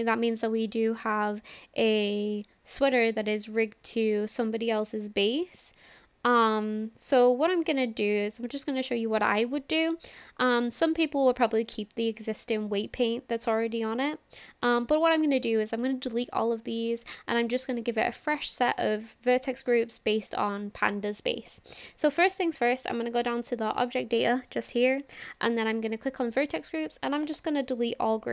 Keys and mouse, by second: 27.3-28.3 drag.